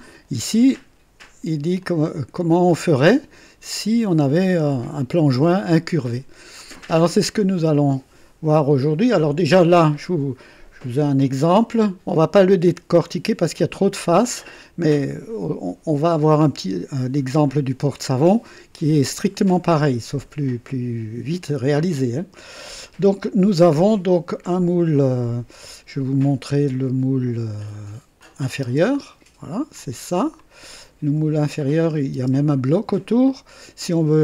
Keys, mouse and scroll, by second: 1.8-3.9 drag, 5.6-9.3 drag, 28.1 click, 28.6 space, 29.7 click, 30.4-31.3 drag, 31.8 click, 32.1 space, 33.2 click.